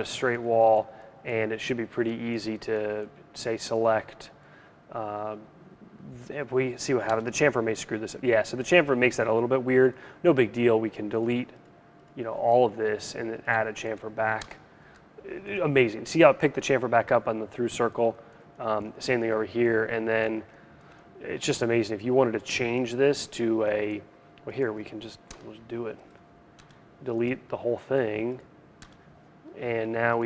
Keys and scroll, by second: 6.6 \, 13.9 BackSpace, 24.8 BackSpace.